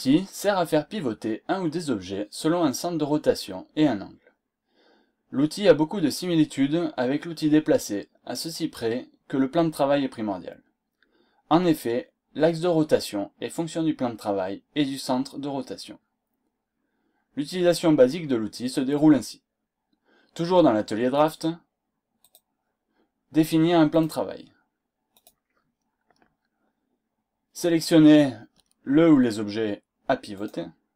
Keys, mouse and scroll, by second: 21.1 click, 22.2 click, 23.8 click, 25.1 click, 30.3 click.